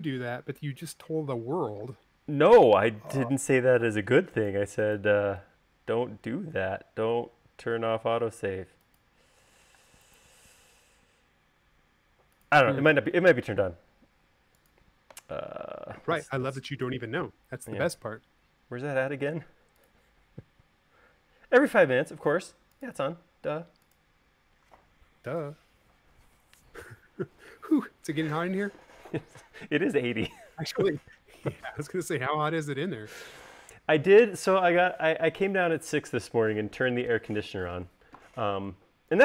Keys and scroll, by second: 2.7 q, 4.5 Left, 4.9 Right, 10.6 m, 24.6 space.